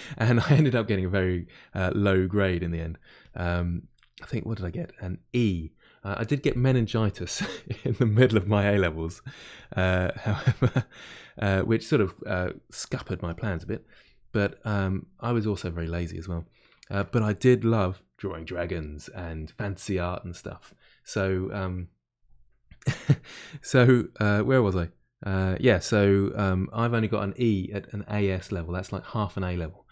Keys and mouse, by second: 2.1 click, 2.7 middle click, 3.2-10.4 drag, 10.4-13.0 middle drag, 13.0-14.8 drag, 14.8-29.9 middle drag.